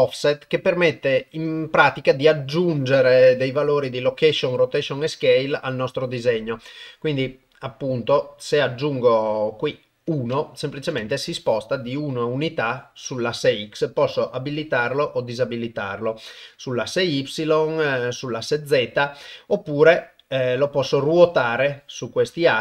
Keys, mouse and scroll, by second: 7.3-9.0 drag, 9.4 click, 10.1 click, 16.6 click, 17.9-19.0 drag, 19.7 click, 20.6-22.0 drag, 22.4 click.